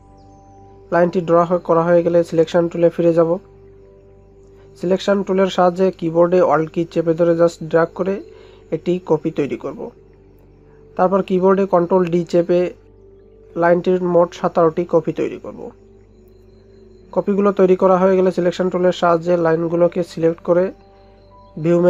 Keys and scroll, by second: 4.6 ctrl+0, 12.1 ctrl+d.